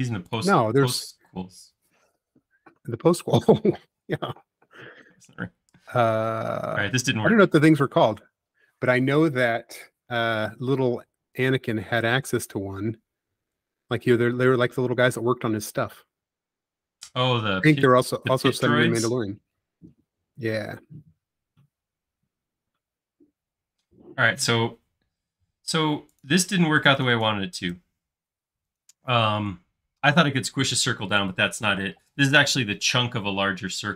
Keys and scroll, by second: 12.1 BackSpace, 13.2 e, 14.6 space, 15.9 typing, 21.5 c, 25.8 space.